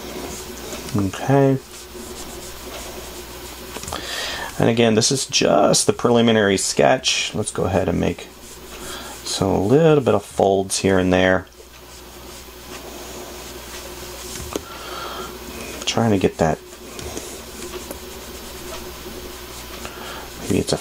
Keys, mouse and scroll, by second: 4.2 space, 10.7 space, 14.8 space, 17.4 space.